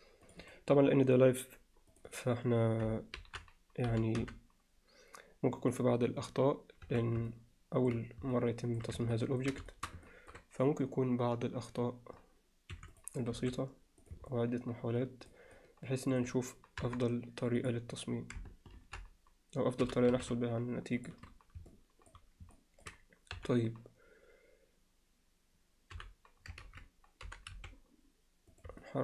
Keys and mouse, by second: 0.3 click, 1.9 click, 2.1 click, 3.2 ctrl+l, 3.9 g, 6.9 z, 7.3 alt+middle click, 8.3 middle click, 9.1 ctrl+middle click, 9.7 alt+shift+middle click, 10.1 ctrl+alt+middle click, 12.8 3, 13.0 click, 13.4 s, 14.3-15.3 middle drag, 15.6 alt+middle click, 16.8 KP_3, 18.8 ctrl+l, 19.8 g, 21.7 middle click, 22.6 alt+middle click, 23.4 KP_7, 26.0 h, 26.6 ctrl+z, 27.3 g, 28.8-29.0 alt+middle drag.